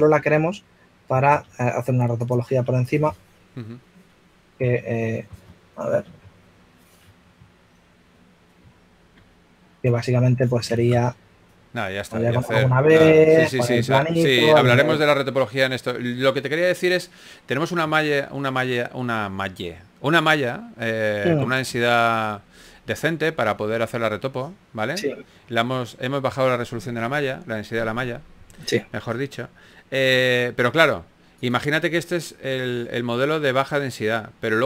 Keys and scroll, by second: 0.1 typing, 3.0-3.7 typing, 6.6 typing, 9.5 5, 10.7 shift+a, 13.0 F6, 14.8-16.5 typing.